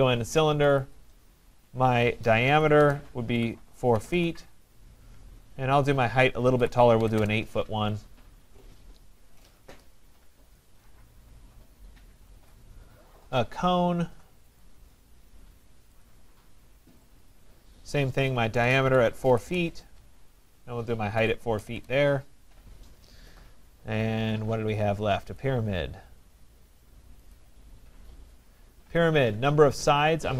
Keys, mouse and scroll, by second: 0.0 click, 0.7 middle click, 0.8 click, 2.6-4.1 typing, 6.4-8.1 typing, 14.6 click, 16.0 click, 17.0 click, 18.3-19.8 typing, 20.9-21.8 typing, 23.0-23.7 typing, 25.4 click, 27.3 click, 29.9 click.